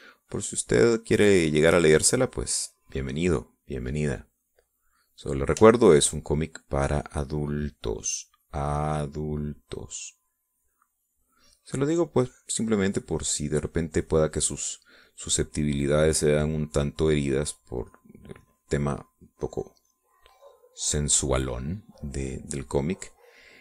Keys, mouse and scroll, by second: 2.2 click, 2.9-6.4 drag, 6.6 shift+click, 7.5-8.8 drag, 8.9-12.3 drag, 12.7-14.4 drag, 15.3 middle click, 16.1-17.8 drag, 18.5 click, 19.6 middle click, 20.3 click, 21.4-23.5 middle drag.